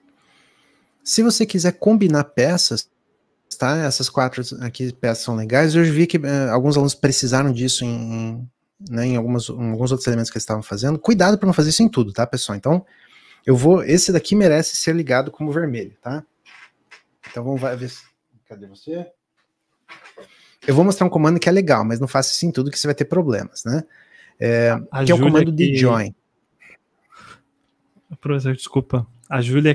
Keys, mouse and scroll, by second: 11.7 click, 27.6 shift+click.